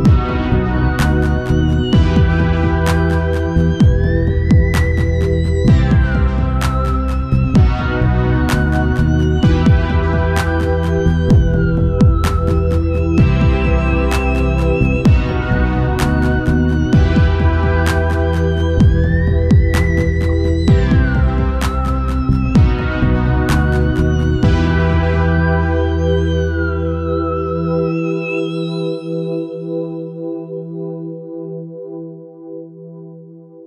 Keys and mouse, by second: 0.9-2.7 drag, 6.1-9.1 drag, 12.3-13.9 drag, 13.0 ctrl+s, 16.4-18.7 right drag, 17.8 middle click, 18.7 shift+d, 19.7-21.4 drag, 21.3 shift+d, 22.0-25.4 drag, 26.3-31.6 right drag, 30.7 shift+d, 31.6-33.1 drag.